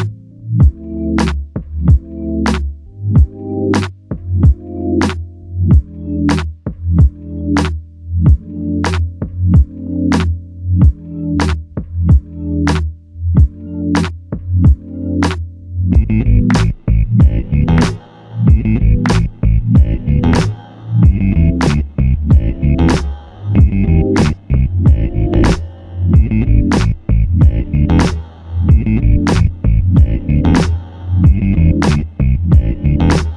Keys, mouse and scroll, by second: 3.8 click, 4.0 alt+click, 4.8 alt+click, 6.8 double click, 11.9 alt+click, 16.2 double click, 18.3 alt+click, 20.6 f, 20.8 alt+click, 23.5 alt+click, 24.2 alt+click, 24.3 shift+click, 29.4 double click, 32.5 ctrl+z.